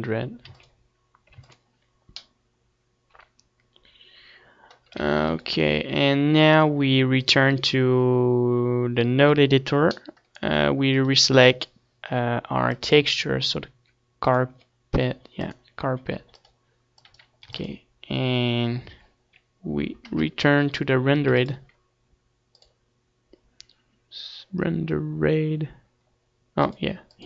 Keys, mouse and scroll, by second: 1.7 ctrl+s, 2.2 middle click, 5.0 ctrl+s, 15.6-19.0 drag, 17.4 ctrl+s, 19.0-20.1 middle drag, 20.1 KP_0, 20.1 KP_Decimal, 21.3 ctrl+s, 22.5-24.0 drag, 26.5-27.2 drag.